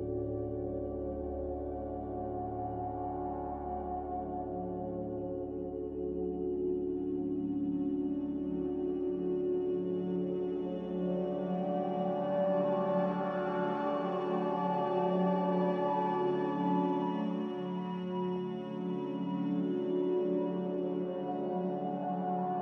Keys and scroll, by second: 11.8 m, 13.0 a.